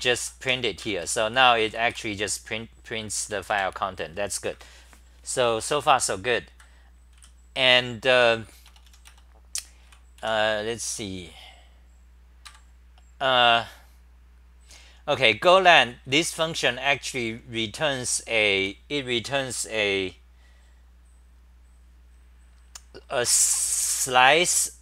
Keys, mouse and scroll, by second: 0.0-2.4 typing, 0.8 ctrl+g, 3.2 super+=, 3.5 super+=, 6.5 ctrl+g, 7.1 w, 8.1 3, 9.8 c, 10.2 2, 12.4 ctrl+g, 13.3 Delete, 13.3-14.4 scroll up 5, 14.4-15.2 scroll up 1, 15.2-19.1 typing.